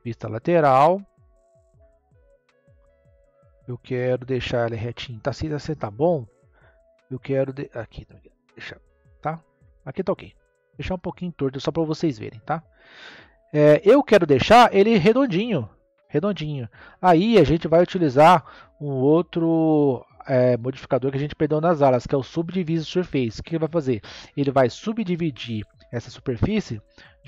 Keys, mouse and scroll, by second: 2.7 click, 5.4-7.0 scroll up 1, 7.0 click, 13.1-13.9 middle drag, 13.9-14.8 scroll down 2, 14.8-17.9 middle drag, 20.8-23.1 drag, 23.1-23.6 scroll down 2, 23.6-27.2 middle drag.